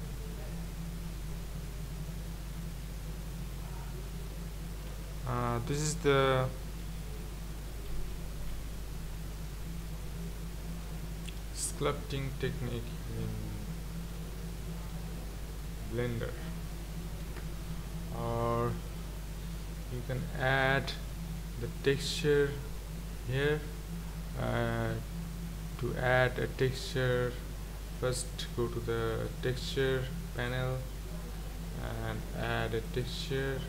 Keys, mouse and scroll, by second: 5.1 scroll up 4, 6.8 ctrl+z, 7.6 scroll down 2, 7.9 ctrl+z, 8.5 ctrl+z, 9.2 ctrl+z, 10.3 ctrl+z, 10.8 ctrl+z, 11.4-15.7 middle drag, 16.3-16.7 scroll down 3, 16.7-19.1 scroll up 3, 33.1-33.6 drag.